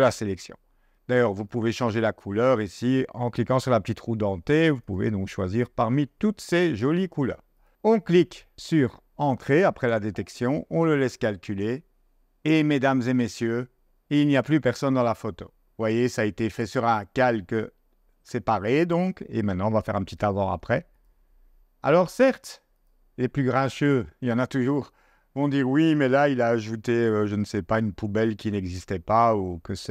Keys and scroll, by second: 9.8 0, 26.8 z.